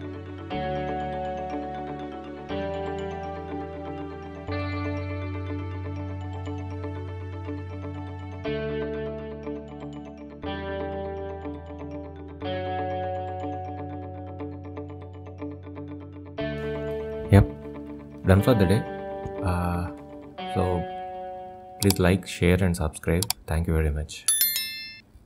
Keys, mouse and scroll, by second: 6.4 Tab, 6.8-7.2 scroll down 1, 7.2 click, 7.6 shift+middle click, 8.6 middle click, 9.5 shift+a, 11.3-11.9 scroll down 5, 11.9 middle click, 12.8 s, 15.9 click, 16.8 click, 18.2 click, 18.9 middle click, 19.6-20.1 scroll up 3, 20.7 shift+middle click.